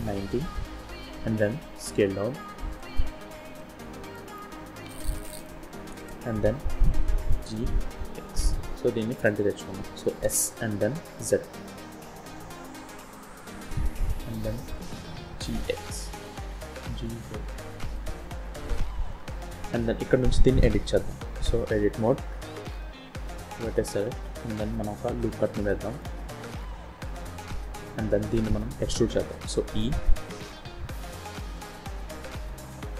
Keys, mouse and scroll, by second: 1.1 s, 2.9-3.4 scroll up 6, 3.5 shift+middle click, 4.2-4.8 scroll up 2, 4.8 scroll up 1, 4.8 s, 5.6 shift+middle click, 7.1 g, 9.7 scroll up 2, 9.8 click, 10.1 s, 15.0 g, 16.7 g, 19.1 scroll up 3, 19.3 scroll down 1, 19.7 shift+middle click, 21.6 Tab, 23.3 click, 25.0 ctrl+r, 28.0 click, 29.3 e.